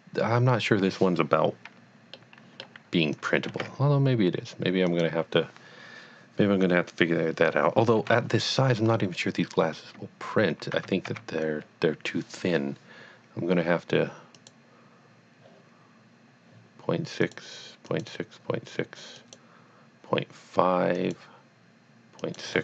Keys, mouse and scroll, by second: 2.2 middle click, 3.1 click, 3.6 g, 5.0 click, 7.0 scroll down 1, 8.0 KP_1, 8.8-9.8 scroll up 1, 9.8 Tab, 10.7 Tab, 11.1 a, 14.4 click, 17.2 click, 17.3 click, 17.8 click, 19.2 click, 21.1 click, 22.2 click.